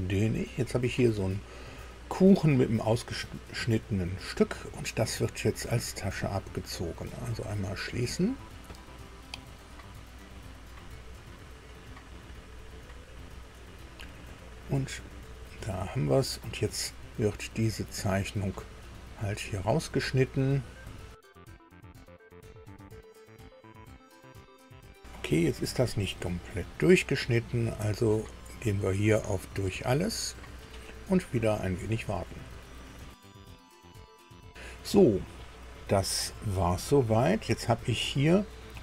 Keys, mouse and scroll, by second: 0.0 click, 7.3 click, 14.2-15.6 middle drag, 15.8 shift+middle click, 17.7 click, 20.8 click, 28.3 click, 30.0 click, 36.0-37.5 middle drag, 37.7-38.2 scroll up 2, 38.6-38.8 middle drag.